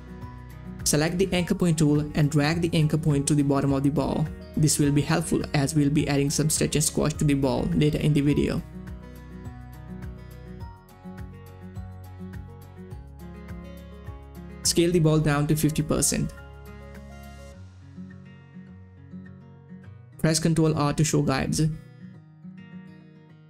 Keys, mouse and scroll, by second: 0.4 click, 4.9 space, 5.0 click, 5.4 space, 6.3-12.8 drag, 14.2 v, 14.5 click, 15.7 s, 16.2 s, 16.7 click, 18.0 5, 19.1 Return, 21.6 ctrl+r.